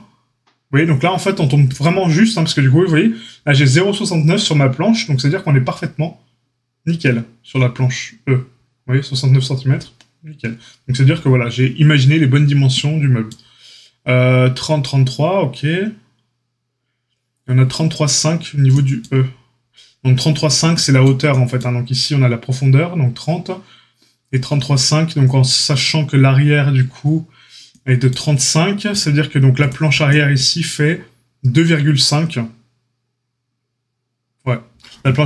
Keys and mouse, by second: 1.7 click, 1.8-28.8 middle drag, 28.8 click, 28.9 middle click, 29.5 click, 29.6-35.2 middle drag.